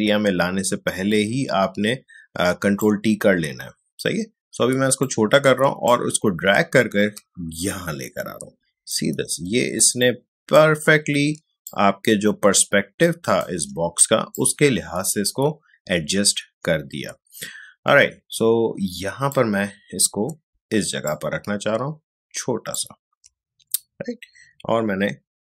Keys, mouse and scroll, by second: 1.1-10.0 alt+shift+drag, 10.0-21.0 alt+shift+drag, 21.0-25.4 shift+drag.